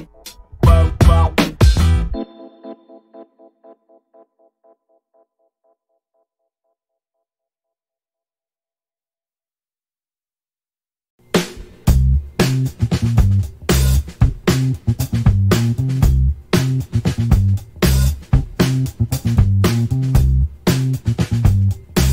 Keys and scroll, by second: 19.8 alt+a.